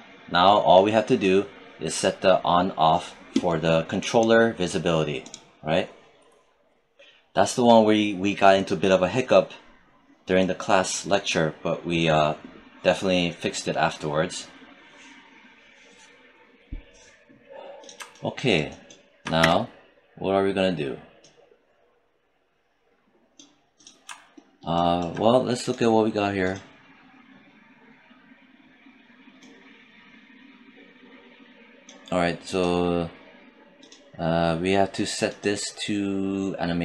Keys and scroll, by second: 19.7 space.